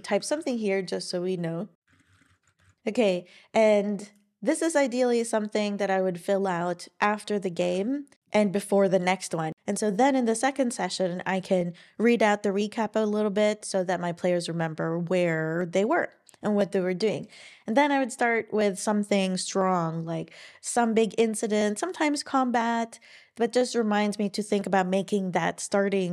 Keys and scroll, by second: 0.1 Right, 1.9-3.2 typing, 7.6 super+w.